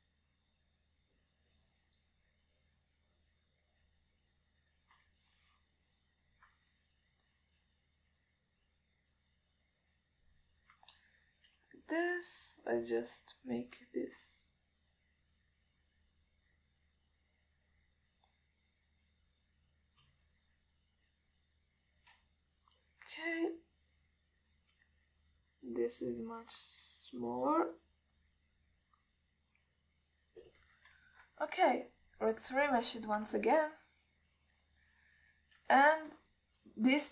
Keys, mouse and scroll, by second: 0.0 click, 0.7 click, 1.2 click, 1.8 click, 2.3 click, 3.5 click, 3.9 click, 4.3 click, 5.1 click, 5.5 click, 6.5-7.7 ctrl+alt+middle drag, 8.9 KP_1, 9.5 click, 10.5 click, 12.9 f, 15.8 click, 16.2 click, 16.5 click, 16.9 click, 17.7 click, 18.0 click, 18.5 click, 18.8 click, 19.1 click, 20.2 click, 20.6 click, 21.0 click, 21.3 f, 22.1 click, 22.5 click, 23.1 click, 23.3 click, 23.7 click, 26.2 click, 26.7 click, 27.0 click, 27.4 click, 28.1 click, 28.5 click, 28.8 click, 29.0 click, 29.5 click, 29.8 click, 31.3 click, 31.6 click, 32.3 ctrl+alt+middle click, 33.2-34.0 drag, 34.3 ctrl+middle click, 34.7-36.7 alt+middle drag, 37.0 ctrl+alt+middle click.